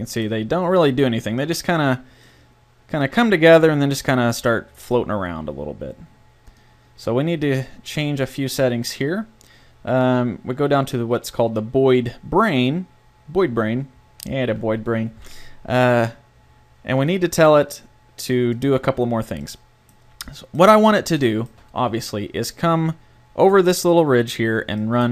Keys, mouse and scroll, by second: 6.5-8.0 drag, 8.0-17.0 middle drag, 17.0-18.8 drag, 18.8-19.9 middle drag, 19.9 click, 20.4-24.6 middle drag, 24.8 middle click.